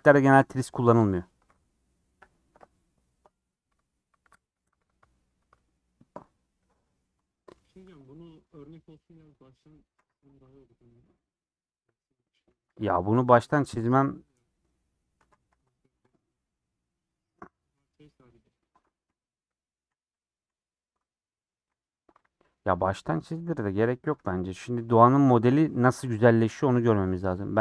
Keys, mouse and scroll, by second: 7.9-10.0 middle drag, 10.0 3, 10.3 Left, 11.1-12.6 middle drag, 12.6 a, 13.2 u, 14.8-15.2 scroll down 3, 15.2 Tab, 15.5 h, 16.1 Left, 16.3 scroll up 4, 16.5-18.8 middle drag, 18.8 Tab, 19.0 3, 19.9 /, 20.5 /, 23.0 middle click, 23.7 ;, 24.2 3, 24.4 click, 27.3-27.6 shift+drag.